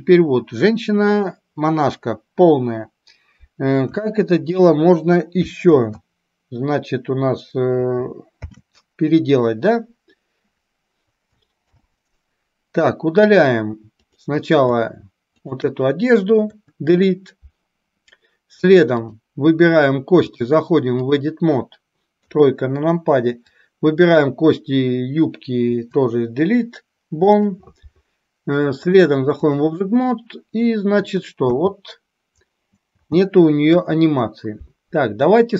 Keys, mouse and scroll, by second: 4.0 KP_1, 5.9 ctrl+z, 8.4 ctrl+h, 11.8 alt+h, 14.1 click, 15.5 shift+click, 16.6 Delete, 20.4-21.4 drag, 22.3 KP_3, 23.6 click, 25.8 Delete, 29.0-29.8 drag, 30.1-31.0 middle drag, 31.6 space, 33.8 space, 33.8 KP_1.